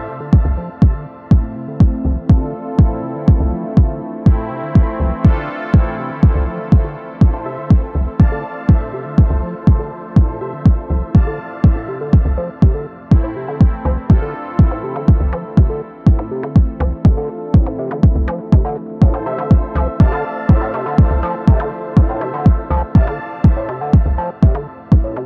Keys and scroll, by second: 10.9 z, 12.0 super+z, 20.4 super+s.